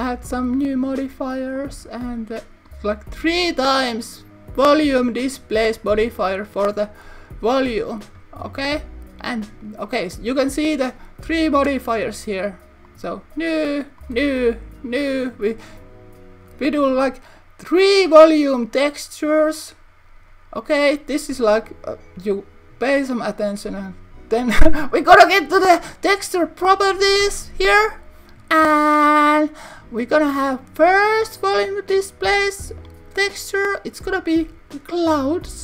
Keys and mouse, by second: 1.6-3.0 drag, 3.5-5.2 drag, 5.9-6.7 drag, 15.2 click, 26.4 click, 32.9-35.6 drag.